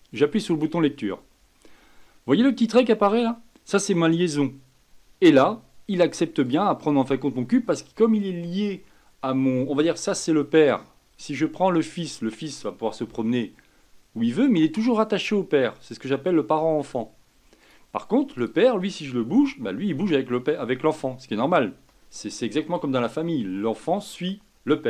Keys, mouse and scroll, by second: 0.5 click, 6.4 drag, 11.2 click, 11.9 click, 13.0 g, 18.4 click, 19.3 g.